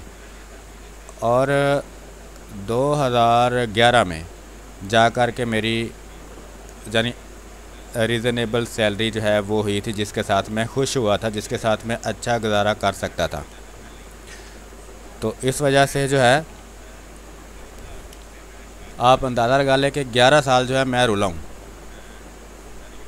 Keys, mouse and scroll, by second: 0.6 space, 0.8 click, 1.1 space, 2.1-3.7 drag, 3.7 space, 4.0 click, 4.3 space, 5.1-6.5 drag, 6.5 space, 6.7 click, 7.1 space, 7.9 x, 8.1 click, 9.0 x, 10.0 click, 10.4 space, 10.7 click, 11.0 space, 12.3 click, 13.5 space, 13.9 alt+click, 14.7 click, 16.4 r, 16.6 click, 17.8 b, 18.0 space, 18.2 click, 18.6 space, 19.2 click, 20.5 space, 20.8 ctrl+click, 21.7-23.0 drag.